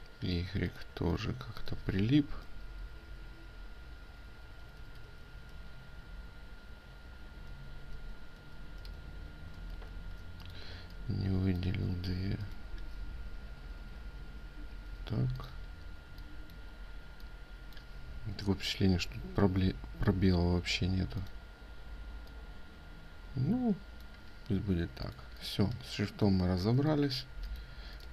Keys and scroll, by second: 5.5 ctrl+z, 6.0 ctrl+z, 6.2 ctrl+z, 6.4 ctrl+z, 9.6 ctrl+shift+z.